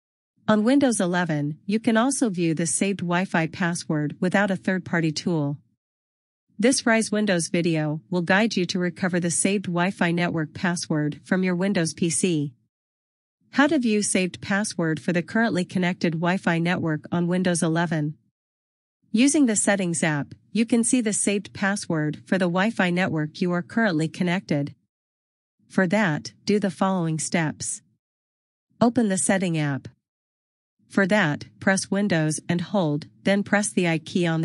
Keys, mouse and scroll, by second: 30.2 click.